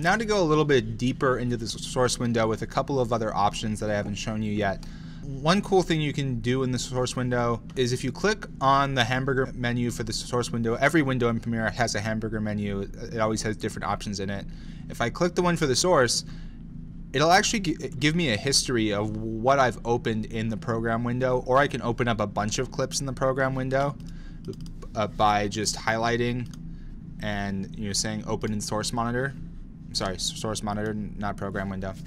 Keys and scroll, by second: 25.8 super+a.